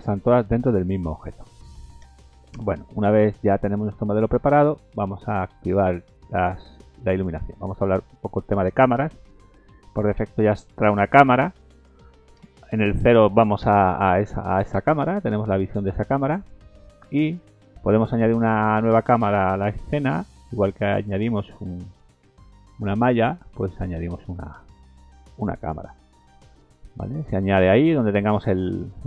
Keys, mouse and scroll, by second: 0.0 Tab, 0.3 middle click, 1.2 middle click, 2.0 KP_0, 2.7-3.8 scroll down 6, 3.8 middle click, 4.2 scroll down 2, 5.1-6.0 scroll up 6, 6.3 click, 7.1 middle click, 7.1 scroll down 3, 7.5 middle click, 8.2 middle click, 9.3 middle click, 10.8 click, 11.2 middle click, 12.4 KP_0, 13.6 ctrl+KP_0, 15.0 middle click, 15.2-15.7 scroll down 4, 16.5 middle click, 17.1 shift+middle click, 19.1 click, 26.3-27.0 scroll down 2, 27.0 middle click, 27.8 middle click, 28.9 middle click.